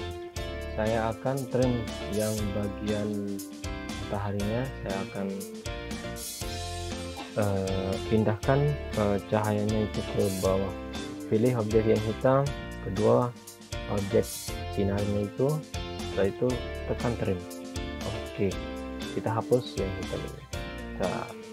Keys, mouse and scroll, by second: 2.0 ctrl+Page_Up, 13.2 shift+click, 16.3 click, 20.4 click, 20.8 scroll down 1.